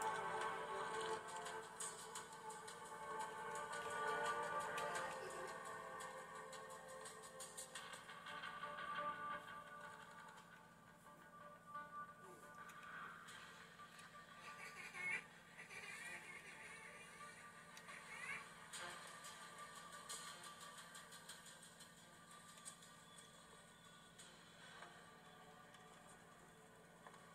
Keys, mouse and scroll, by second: 3.2 ctrl+x, 4.3-8.0 typing, 5.8 Return, 6.2 ctrl+x, 6.2 Return, 12.3 super+6, 16.4 super+5, 23.0 super+1, 26.0 super+2.